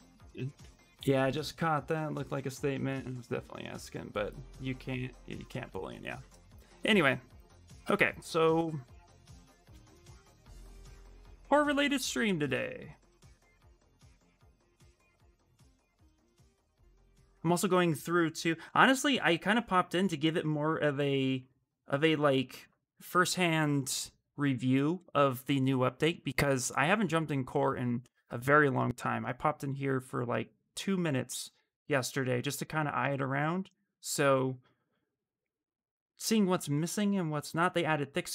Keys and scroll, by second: 7.4 shift+f, 8.3 ctrl+d, 8.6 ctrl+d.